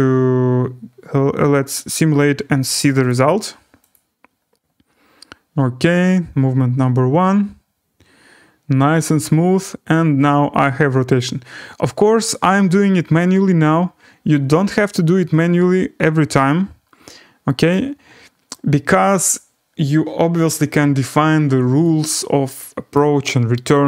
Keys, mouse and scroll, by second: 3.0 click, 3.9 click, 17.7-21.5 drag, 21.9 click, 22.2 click, 22.9 right click.